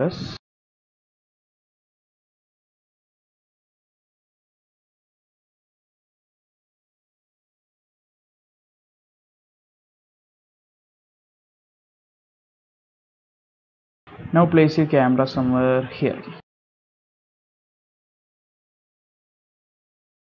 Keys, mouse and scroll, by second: 0.9 click, 1.3 g, 2.0 click, 2.2 x, 2.8 click, 3.2 shift+middle click, 3.5 middle click, 3.9 scroll up 1, 4.2 shift+middle click, 4.8 g, 5.6 middle click, 6.9 s, 7.6 g, 9.1 middle click, 9.7 g, 11.6 middle click, 12.6 shift+middle click, 13.0-13.6 scroll up 2, 13.6 shift+middle click, 14.6 shift+middle click, 14.9 scroll down 2, 15.4-15.9 scroll up 2, 16.2 shift+middle click, 16.6 middle click, 16.8 scroll down 1, 17.0 ctrl+alt+KP_0, 17.3 click, 17.5-20.3 typing.